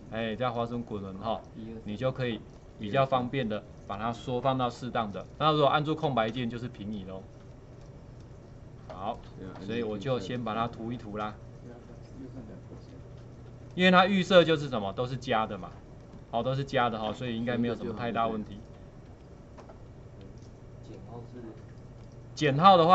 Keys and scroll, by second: 6.4 space, 6.9 space.